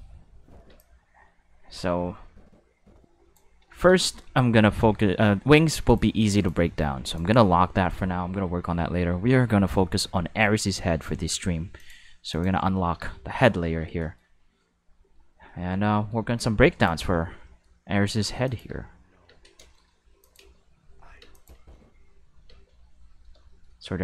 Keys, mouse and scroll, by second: 0.7 space, 0.8-3.3 drag, 4.0 shift+middle click, 5.9 click, 6.3 click, 7.1 click, 10.2 middle click, 11.8 click, 12.3 click, 14.0 shift+middle drag, 14.4-15.0 middle drag, 16.3 click, 17.5 middle click, 18.4 click, 18.6 space, 19.2 space, 20.2 click, 20.4 space, 21.2 space, 21.3 click, 21.5 space, 22.4 space, 23.0 middle click, 23.5 shift+middle click.